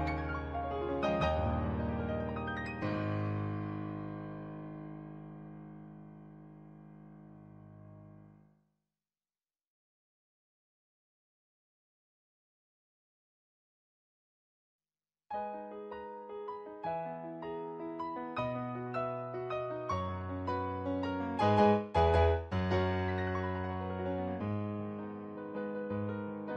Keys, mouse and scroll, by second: 1.3 ctrl+z, 2.3 ctrl+z, 4.0 ctrl+z, 10.2 ctrl+z, 12.4 ctrl+z, 14.1 ctrl+z, 14.5 ctrl+z, 14.9 ctrl+z, 15.5 ctrl+z, 15.9 ctrl+z, 16.5 ctrl+z, 17.3 ctrl+z, 18.0 ctrl+z, 19.6 ctrl+z, 20.6 ctrl+z, 21.2 ctrl+z, 23.0 ctrl+z, 23.2 ctrl+z, 23.6 ctrl+z, 24.2 ctrl+z, 25.4 ctrl+z, 25.7 ctrl+z.